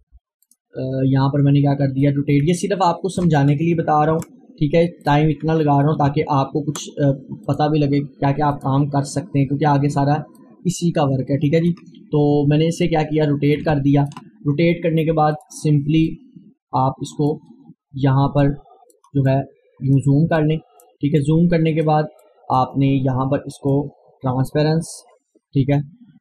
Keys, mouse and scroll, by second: 4.1 ctrl+z, 5.1 click, 6.0 ctrl+z, 7.4-12.9 drag, 12.9-26.2 drag.